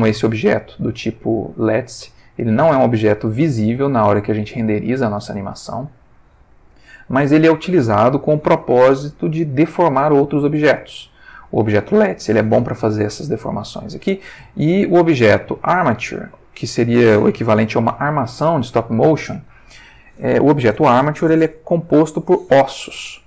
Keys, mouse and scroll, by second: 0.5 g, 2.1 Escape, 3.6-4.3 ctrl+middle drag, 14.4 h, 15.1 click, 16.0 r, 16.9 Escape.